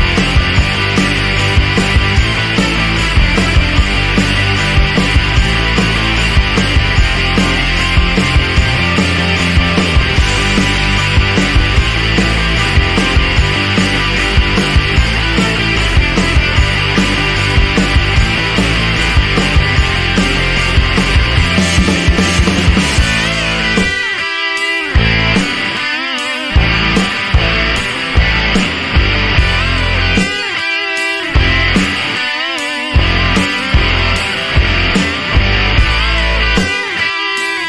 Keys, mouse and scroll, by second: 0.1 drag, 0.3 click, 0.6 ctrl+d, 0.7 ctrl+drag, 1.0 ctrl+drag, 1.3 ctrl+shift+click, 1.6 ctrl+d, 1.7 ctrl+click, 2.6 drag, 2.9 click, 3.7 click, 4.1 click, 4.7 click, 5.1 click, 5.5 click, 6.0 click, 6.8 click, 7.3 click, 7.7 click, 8.2 click, 8.7 click, 8.9 click, 9.2 click, 9.3 click, 9.7 click, 10.5 click, 11.5 click, 11.9 click, 12.7 click, 13.1 click, 13.5 click, 14.1 click, 14.6 click, 15.3 click, 15.7 click, 16.2 click, 16.5 click, 17.0 click, 17.3 drag, 17.7 click, 18.1 ctrl+shift+click, 18.3 ctrl+shift+click, 18.4 ctrl+shift+click, 19.3 click, 20.2 click, 21.5-21.9 scroll down 2, 22.1-22.7 scroll up 4, 23.2 scroll down 1, 23.4 click, 23.8-33.1 typing, 25.6 click, 27.5 scroll up 1, 27.7 shift+click, 29.8 click, 32.1 click, 33.1 click, 33.8 click, 34.2 click, 34.5 click, 35.4 click, 36.2 click, 37.4 click.